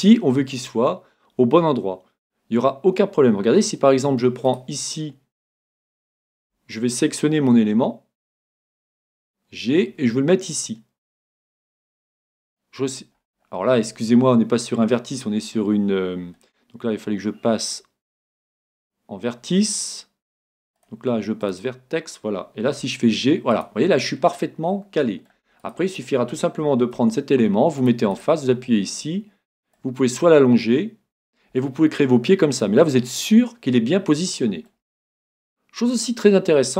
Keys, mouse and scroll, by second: 4.5 right click, 6.4 a, 7.8 l, 9.0 g, 12.3-14.0 drag, 12.6-15.1 middle drag, 15.1 scroll up 1, 20.8-22.6 drag, 22.9 g, 23.7-25.6 drag, 24.0-25.9 middle drag, 25.6 right click, 26.1-28.1 middle drag, 27.0 ctrl+t, 28.2 right click, 29.8-31.6 drag, 31.8-36.7 middle drag.